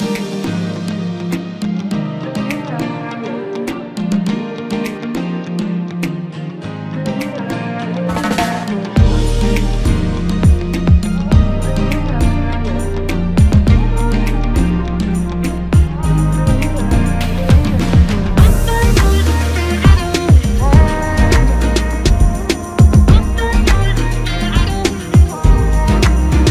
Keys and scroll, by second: 1.7 ctrl+KP_Subtract, 2.9 space, 10.0 typing, 13.1-14.2 typing.